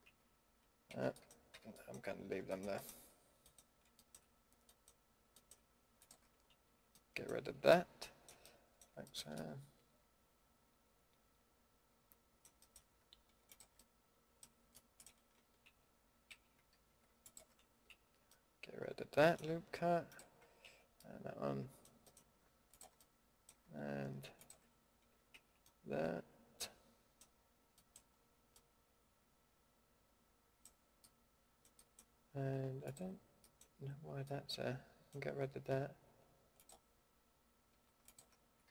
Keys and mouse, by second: 0.0 ctrl+x, 0.9 ctrl+z, 1.5 a, 6.5 ctrl+x, 10.4 middle click, 12.6-13.9 middle drag, 14.3 click, 14.5 drag, 14.7 middle drag, 15.6 ctrl+x, 16.3 ctrl+z, 16.8 a, 17.9 ctrl+x, 18.3 middle click, 20.6 ctrl+x, 23.2 middle click, 25.3 ctrl+x, 25.6 middle drag, 31.5 middle drag, 33.1 middle click, 33.5 middle click, 33.9 ctrl+x, 34.2 middle drag, 36.5-38.7 middle drag, 37.7 a.